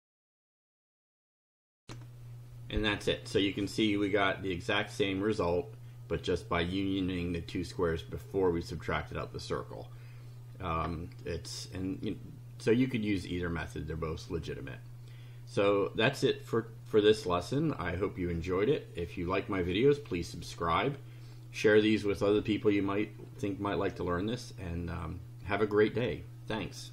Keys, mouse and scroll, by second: 1.8 ctrl+r.